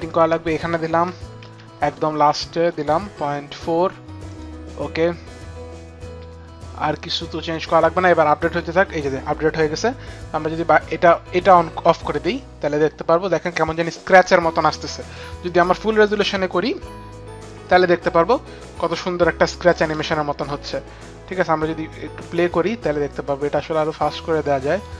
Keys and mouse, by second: 0.0 click, 0.0 KP_4, 2.2 Right, 2.2 BackSpace, 3.5 KP_4, 12.1 click, 15.4 click, 16.0 click, 19.2 click, 19.9 space, 24.0 click.